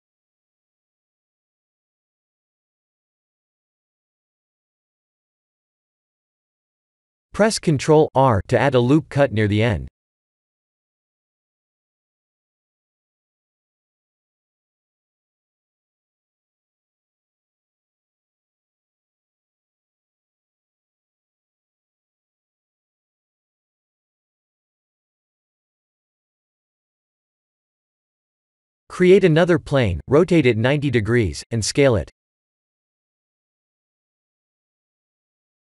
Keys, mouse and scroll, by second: 1.0 s, 2.4 shift+middle click, 3.0 e, 4.6 e, 10.3 ctrl+r, 12.8 click, 13.2 b, 15.2 shift+z, 15.6 shift+z, 16.7 g, 18.6 Tab, 19.2 middle click, 20.1 shift+z, 20.6-21.1 scroll down 3, 21.1 middle click, 22.6 middle click, 23.6 right click, 24.4 click, 24.8 middle click, 28.0 KP_1, 29.2 shift+z, 30.7 click, 31.6 shift+a.